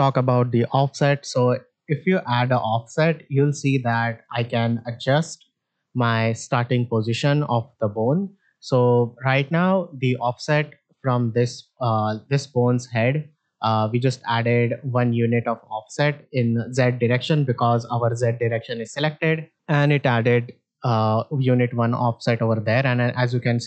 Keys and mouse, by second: 1.7-3.8 drag, 4.3 click, 6.3 middle drag, 8.5 middle click, 12.2 click, 16.0 click, 20.2 click, 22.1-23.6 drag.